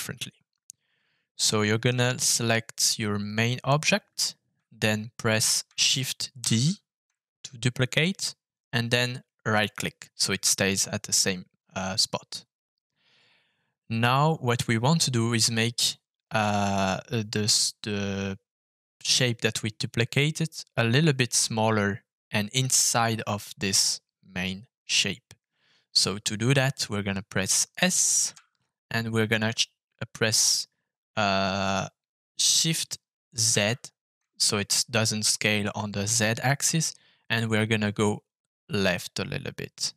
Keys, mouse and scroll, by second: 1.3 shift+middle click, 6.4 shift+d, 9.6 right click, 28.3 s, 33.5 shift+z.